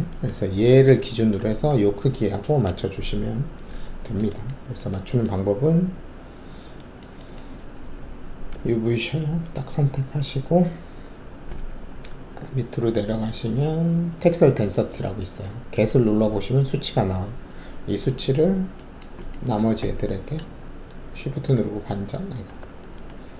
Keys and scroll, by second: 8.5 alt+5, 22.5 alt+shift+`.